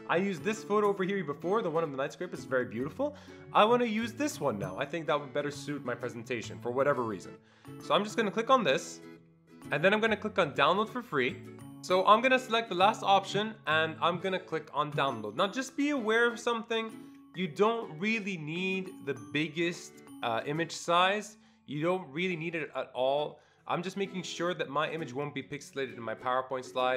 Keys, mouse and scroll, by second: 3.3 scroll up 1, 3.5 scroll down 1, 3.7 scroll up 1, 8.1 click, 8.1 scroll up 1, 10.8 click, 10.8-11.8 scroll up 1, 13.3 click, 15.0 click.